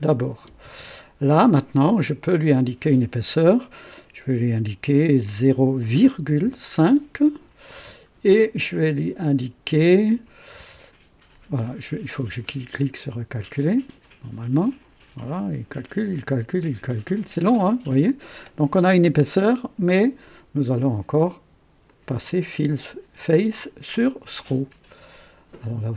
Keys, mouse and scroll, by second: 2.0 click, 5.4-6.4 typing, 12.4 click, 21.8 click, 22.5 click, 23.6 click.